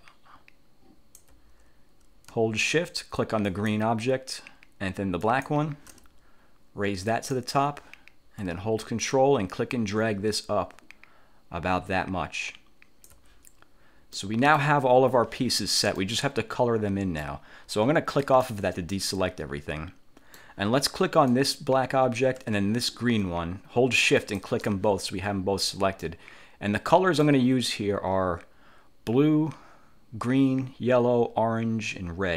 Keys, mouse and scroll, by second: 3.5 shift+click, 5.4 shift+click, 7.2 click, 9.1-13.4 ctrl+drag, 14.3 middle click, 16.1-17.4 middle drag, 17.4 click, 18.3 click, 19.1 middle click, 19.1-19.7 scroll up 1, 19.7-20.7 drag, 21.4 click, 24.3 shift+click, 26.1 click, 27.1 middle click.